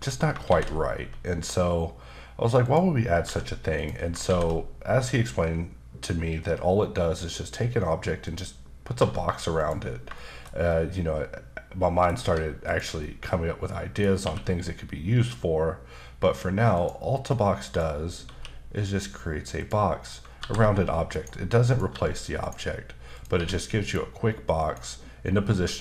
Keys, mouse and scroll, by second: 0.4 shift+a, 2.6 click, 3.2 g, 3.7 click, 4.2 shift+a, 8.2 click, 9.0 g, 9.5 click, 10.1 shift+middle click, 12.2 g, 12.7 click, 13.0 middle click, 14.2 q, 16.7 click, 17.6 click, 18.3 q, 19.6 click, 20.4 g, 21.1 right click, 21.6 click, 21.9 g, 22.4 right click, 23.1 click, 23.3 q, 24.6 click, 25.5 g.